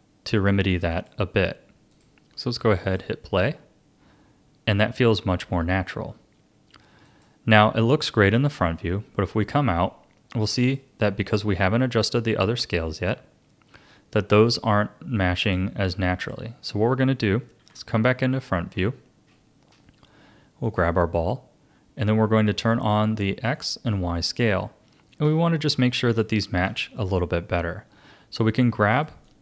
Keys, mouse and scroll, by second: 1.9-5.9 drag, 7.0-8.3 drag, 8.3 a, 8.8-10.6 middle drag, 10.6-17.6 drag, 17.6 KP_1, 18.7-19.3 scroll up 1, 20.6 click, 22.5 click, 23.6 click, 24.6 shift+middle click, 25.4-26.2 scroll up 4, 26.2-28.9 shift+middle drag, 28.9 click, 29.2 click.